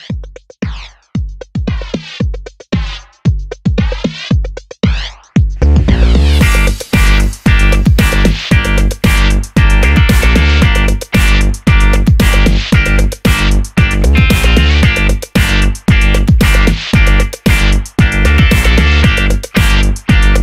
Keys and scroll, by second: 9.6 super+a.